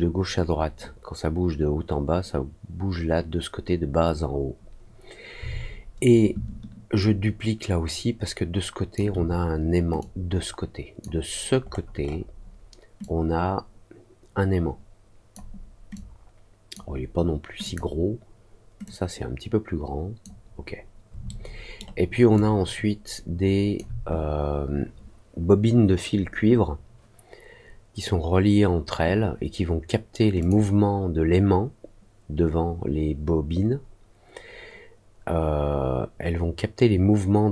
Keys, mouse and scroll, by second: 6.9-8.9 ctrl+drag, 9.9 click, 11.6 middle click, 12.0 middle click, 12.9-15.3 drag, 15.9 click, 17.6 click, 18.8-20.2 drag, 21.2 alt+middle click, 22.3-23.7 alt+drag, 30.3 click.